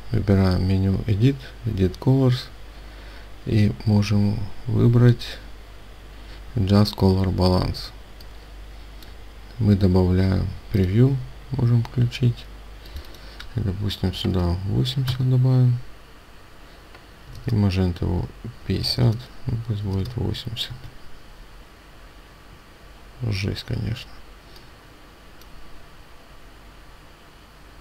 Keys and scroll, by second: 15.0 Tab, 18.9 BackSpace, 20.6 Tab.